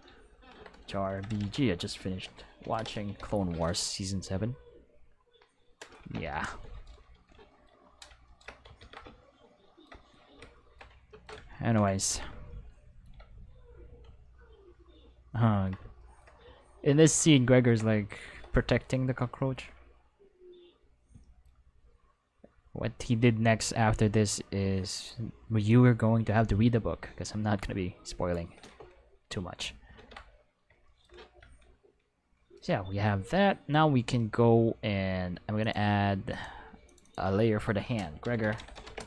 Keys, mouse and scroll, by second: 0.1 shift+f, 0.7 Left, 1.1-3.1 typing, 5.9 Return, 8.8 ctrl+s, 23.0-25.1 drag, 25.7-28.3 drag, 28.6 Escape, 30.0 ctrl+s, 35.6 click, 35.6 right click, 36.3 click, 36.9 click, 37.0 click, 38.2-39.0 typing.